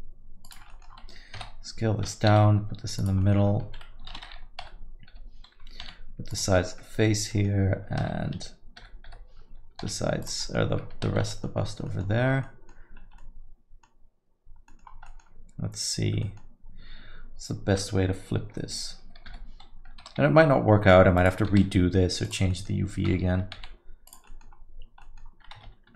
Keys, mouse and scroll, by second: 0.7 middle click, 1.3 KP_7, 2.3 g, 3.2 scroll up 1, 3.2 middle click, 3.6 alt+a, 4.6 l, 5.1 l, 5.8 g, 6.5 middle click, 7.3 middle click, 8.0 alt+a, 8.8 l, 9.1 l, 9.8 g, 10.4 middle click, 11.3 alt+a, 11.3 middle click, 11.6-12.7 scroll up 5, 11.8 middle click, 12.4 middle click, 13.0 scroll up 1, 13.2 middle click, 14.1-14.9 scroll down 4, 14.7 middle click, 15.0 middle click, 15.9 scroll down 2, 16.2 middle click, 20.0 l, 20.0 r, 21.5 s, 22.5 middle click, 23.5 g, 24.2 middle click, 24.5-25.0 scroll down 1, 25.0 middle click, 25.7 ctrl+z.